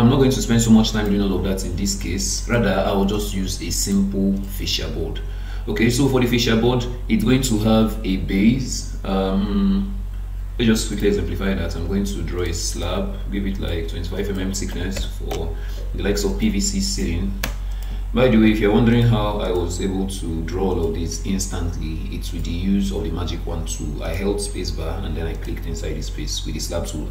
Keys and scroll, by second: 15.3 Return.